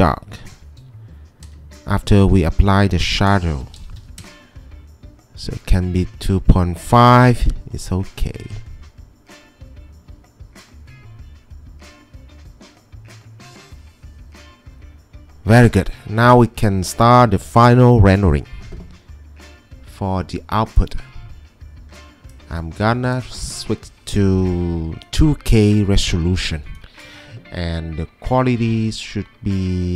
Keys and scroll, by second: 0.7 3, 1.4 Return, 3.1 Return, 3.2-4.7 typing, 6.2-7.1 typing.